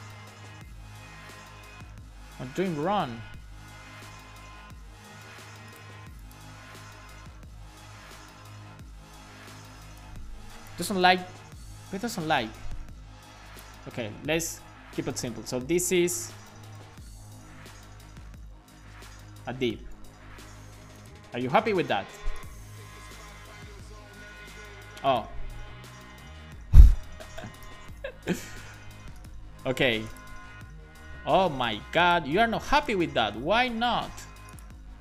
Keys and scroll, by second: 11.1 super+x, 14.2 BackSpace, 16.3-19.4 typing, 16.8 shift+Left, 19.9 super+s, 25.7 BackSpace, 26.1 Right, 26.8 super+s, 28.3 alt+shift+f, 28.6 super+s.